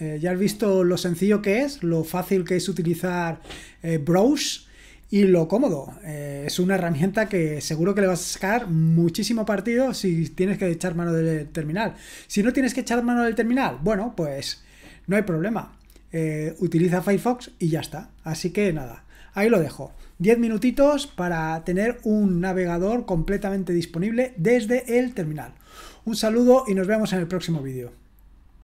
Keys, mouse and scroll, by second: 28.5 click.